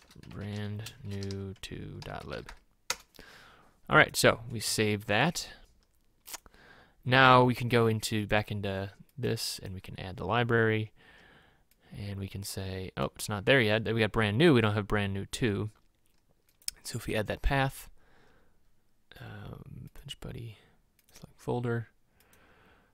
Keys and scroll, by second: 0.2-5.1 typing.